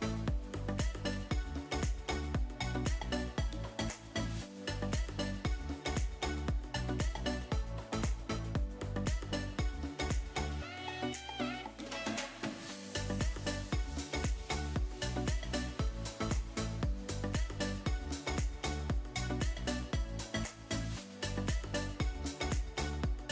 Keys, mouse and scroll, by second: 1.3 shift+click, 3.8-8.6 drag, 10.8-13.0 alt+drag, 14.3-20.0 drag, 23.1-23.3 drag.